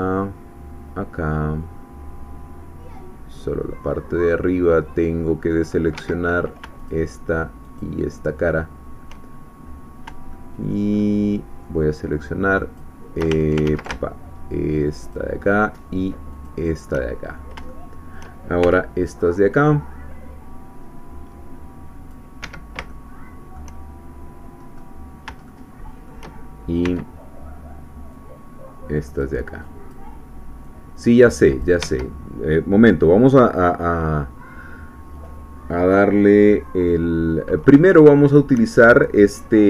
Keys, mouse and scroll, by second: 6.0 Escape, 6.9 shift+click, 7.8 shift+click, 9.3-9.8 shift+scroll up 3, 10.3 shift+middle click, 12.8 shift+click, 13.7 ctrl+z, 15.0 shift+click, 16.5 shift+click, 17.1-17.6 shift+scroll down 4, 17.7 shift+middle click, 18.6 shift+c, 19.1-22.3 shift+drag, 22.4 Escape, 22.9 shift+middle click, 24.8-25.4 scroll up 4, 25.5-26.7 shift+middle drag, 26.8 c, 28.1-29.4 drag, 29.6 click, 30.6-31.8 drag, 31.8 Escape, 37.0 scroll down 1, 37.8 shift+click.